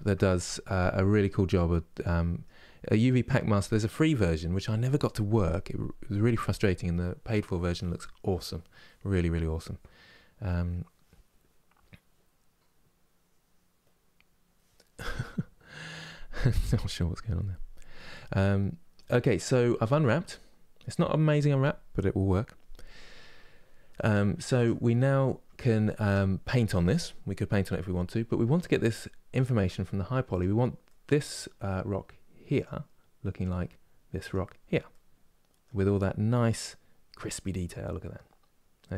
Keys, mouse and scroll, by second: 0.0 ctrl+space, 18.7 scroll up 3, 19.4 shift+middle click, 19.8-20.6 scroll up 3, 20.6-24.3 middle drag, 24.3 Tab, 24.7-29.1 middle drag, 29.1 click, 30.0 click, 30.6-32.3 middle drag, 32.3-34.6 drag, 34.6-35.8 middle drag, 35.8-36.4 scroll down 1, 36.4-38.9 middle drag.